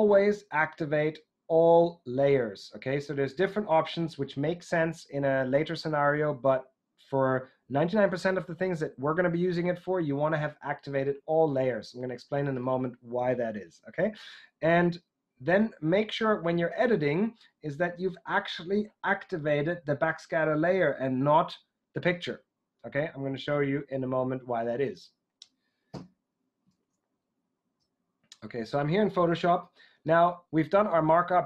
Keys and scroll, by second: 25.9 Left, 26.6 super+Tab.